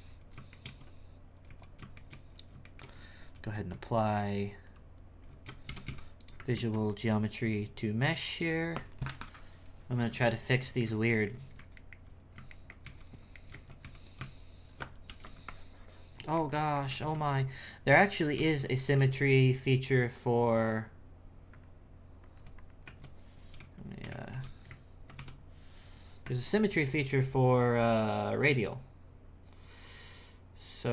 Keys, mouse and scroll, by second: 0.0-0.5 scroll up 1, 0.5 shift+middle click, 1.2 scroll down 3, 1.5 x, 1.6 z, 1.9 shift+middle click, 2.2-2.6 scroll down 3, 2.6 shift+middle click, 3.3 ctrl+a, 5.7 shift+d, 6.5 ctrl+a, 10.6-11.9 shift+middle drag, 12.6 ctrl+middle click, 12.9 z, 13.4 shift+middle click, 13.8 z, 14.2 Tab, 15.1 f, 15.5 shift+click, 16.4 middle click, 17.0 ctrl+z, 17.9 n, 18.3 n, 18.9-20.2 shift+middle drag, 20.2 click, 21.5-22.7 drag, 22.8 Tab, 24.3 alt+g, 25.1 KP_Divide, 26.2 Tab.